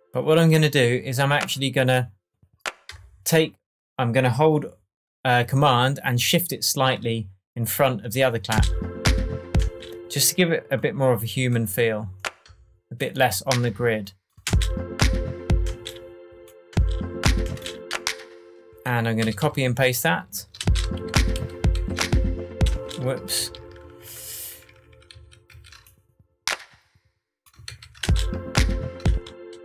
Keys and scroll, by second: 8.5 space, 10.3 space, 14.4 super+space, 15.6 space, 19.2 super+d, 20.6 super+space, 20.9 super+d, 22.7 super+space, 23.1 super+z, 27.6 super+d, 28.0 super+space.